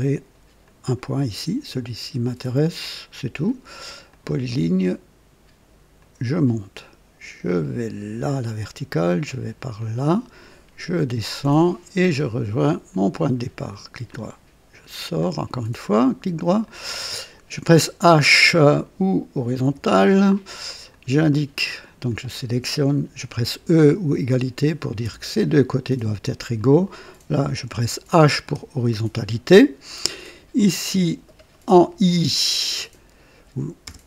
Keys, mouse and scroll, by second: 0.6 click, 4.1 click, 6.0 click, 8.2 click, 9.8 click, 11.4 click, 12.9 click, 13.7 right click, 14.8-15.2 scroll up 2, 15.3 right click, 16.6 click, 19.6 h, 19.8 h, 20.9 click, 21.9 click, 25.1 e, 26.5 click, 28.4 h, 30.5 click, 33.8 i.